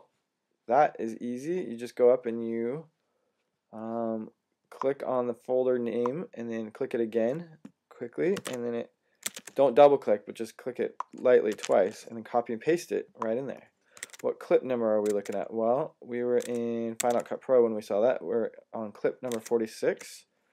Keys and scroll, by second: 0.9-1.6 typing, 8.2 typing, 9.1 Tab, 11.4 v, 14.0 super+Tab, 14.9 Tab, 16.3 Tab, 16.9 Tab, 19.2 Tab.